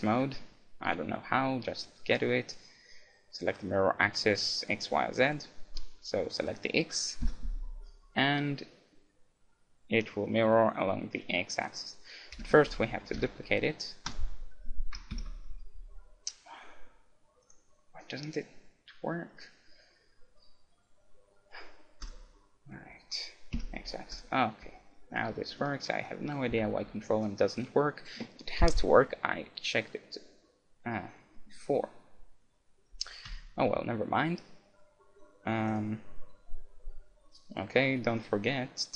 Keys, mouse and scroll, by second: 13.2 shift+d, 14.1-15.9 right drag, 15.5 x, 17.4-19.5 drag, 24.8-28.5 middle drag, 26.6 a, 31.4-33.2 middle drag, 33.4 KP_1, 35.3 middle click, 35.7-37.5 right drag, 38.1-38.9 drag.